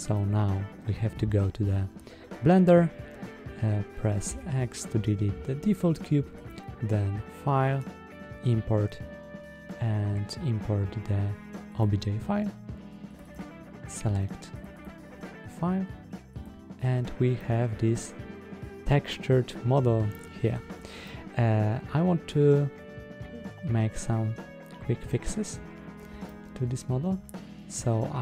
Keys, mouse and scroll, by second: 6.3-11.9 drag, 16.3 click, 17.2-20.4 middle drag, 20.9-25.0 middle drag, 26.1-27.6 middle drag.